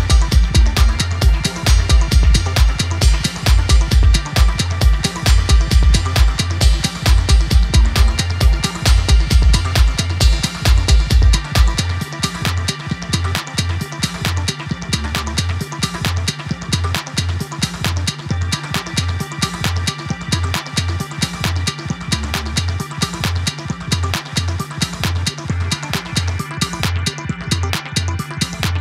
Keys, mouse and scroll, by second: 0.1 scroll down 2, 0.3 scroll up 1, 0.6-2.1 middle drag, 3.6 click, 4.0 scroll up 2, 4.2 middle click, 5.1 click, 6.0 scroll down 3, 6.3 middle click, 6.7 KP_7, 7.6 click, 7.9-8.4 scroll up 1, 8.4-9.8 drag, 10.2 alt+shift+click, 14.0 click, 14.5 ctrl+r, 15.3 click, 15.7 alt+shift+click, 16.1 click, 16.4 alt+shift+click, 16.8 click, 17.0 click, 18.2 click, 18.5 shift+click, 18.8 alt+shift+click, 19.3 z, 20.2 shift+click, 20.9 click, 21.4 shift+click, 22.2 s, 24.1 scroll down 2, 24.4 middle click, 25.1 click, 25.8 z, 26.3 scroll up 2, 27.0 click, 28.2 click, 28.6 scroll up 1.